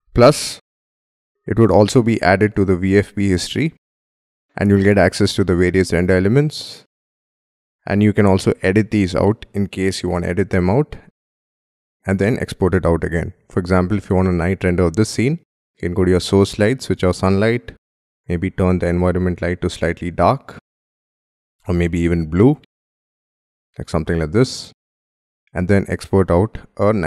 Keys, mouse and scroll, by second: 4.0 double click, 7.0 double click, 10.4-11.2 scroll up 1, 11.2-11.6 scroll down 1, 11.6 scroll up 1, 11.7-13.3 scroll down 1, 13.3-13.6 scroll up 2, 13.6-15.8 scroll down 2, 21.8 double click.